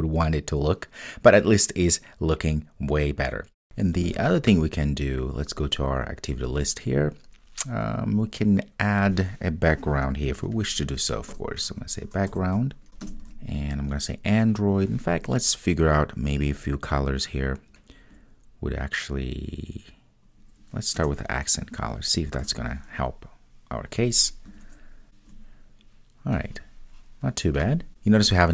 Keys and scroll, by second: 13.1 Return, 21.1 Return, 22.5 super+s.